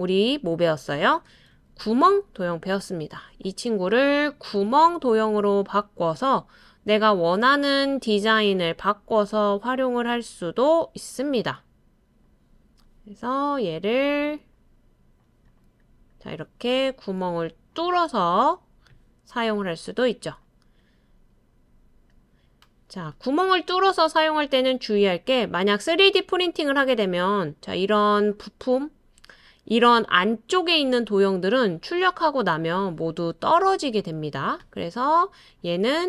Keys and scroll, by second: 1.5 super+c, 1.8 super+v.